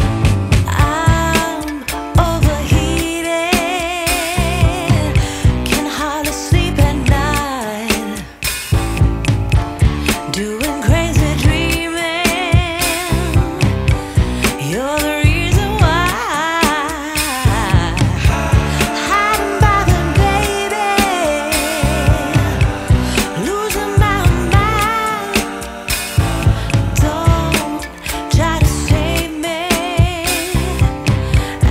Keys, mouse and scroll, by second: 0.0 ctrl+shift+click, 0.9-1.3 scroll down 1, 1.6 right click, 1.9 scroll down 1, 2.0 scroll up 1, 2.3 right click, 2.7 scroll up 1, 3.0 right click, 6.3 Return, 6.7-7.8 scroll down 1, 7.8 right click, 9.5 click, 12.8 right click, 13.8 Tab, 17.1 scroll down 1, 17.2 scroll up 1, 18.5 Tab, 19.4 Escape, 19.5-19.9 scroll down 1, 19.9-21.6 scroll up 1, 21.7 scroll down 1, 21.9-22.2 scroll up 1, 22.2 right click, 22.5 shift+right click, 23.8 Tab, 28.2 Return, 28.3 click, 30.6 right click, 31.4 click.